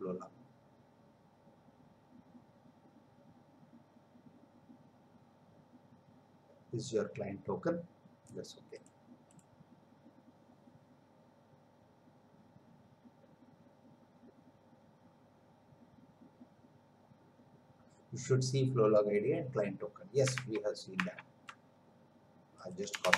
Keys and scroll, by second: 20.5 alt+Tab, 22.9 Return.